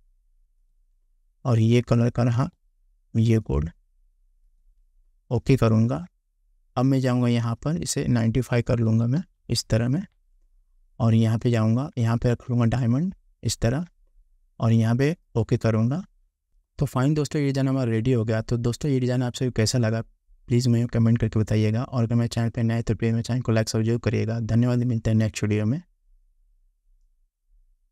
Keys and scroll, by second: 9.0 9, 9.3 5.